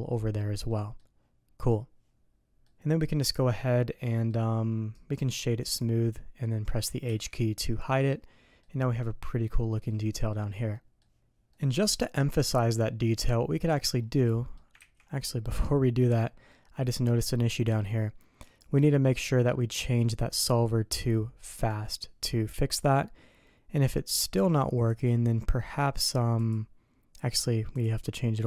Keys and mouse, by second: 0.7 middle click, 2.3 middle click, 3.3 click, 4.1 middle click, 5.0 click, 7.1 h, 7.4 middle click, 8.1-8.6 drag, 9.0 click, 10.1 click, 10.7 drag, 11.5-12.4 drag, 12.9-13.9 drag, 14.3 drag, 14.8 ctrl+z, 15.2-16.0 drag, 16.5 click, 17.3-17.8 middle drag, 18.5 click, 21.6 click, 22.7 middle click, 23.4 click, 24.9 click, 26.4 click, 27.4 click.